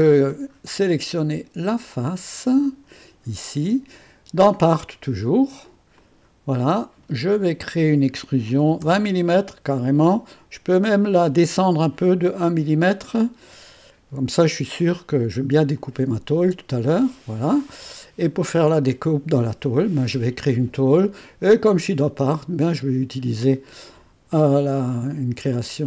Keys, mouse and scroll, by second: 1.8 click, 2.5 click, 3.5 click, 5.9 click, 8.4-9.3 typing, 12.5-15.5 scroll up 2, 15.7 click, 18.2 right click, 22.7 click.